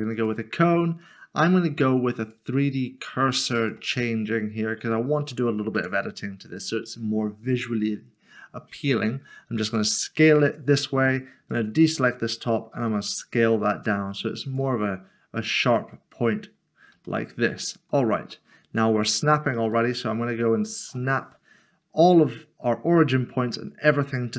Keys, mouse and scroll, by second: 0.2 click, 4.4 scroll up 1, 4.9 scroll up 1, 5.0 middle click, 9.1 s, 10.4 s, 12.7 s, 14.4 click, 16.5-16.9 scroll up 1, 17.0 shift+middle click, 17.7 scroll down 1, 18.3 middle click, 19.7 shift+right click.